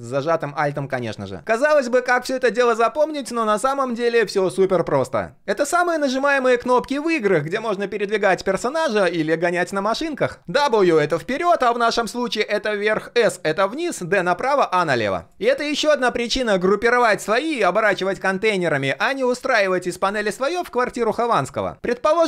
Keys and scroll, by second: 2.5 ctrl+v.